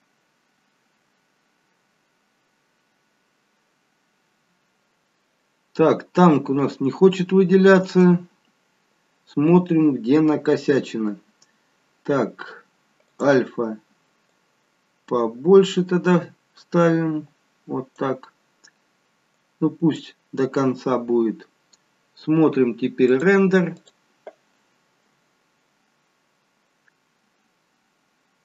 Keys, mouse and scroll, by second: 13.1 click, 14.4 click, 19.4 click, 23.1 click.